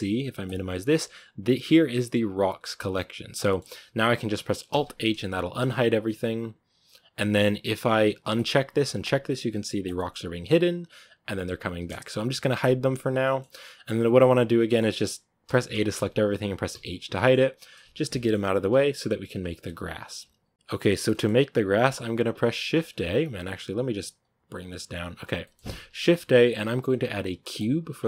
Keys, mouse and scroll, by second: 3.1 scroll down 3, 3.3-4.6 middle drag, 4.6 alt+h, 5.2 a, 8.2-13.1 drag, 13.1-14.3 middle drag, 14.3 scroll down 2, 14.6-15.3 middle drag, 15.3 a, 15.6 a, 15.8 a, 16.6 h, 17.0 middle click, 17.6-18.0 scroll up 6, 18.0-18.6 middle drag, 18.6-19.3 scroll up 1, 19.3-19.8 scroll up 1, 19.8-21.0 scroll up 1, 21.0-21.7 shift+middle drag, 21.7-22.8 scroll up 1, 22.8-23.9 scroll up 1, 23.9-25.3 scroll up 1, 25.3-27.5 middle drag, 27.5 shift+a, 27.9-28.0 middle drag.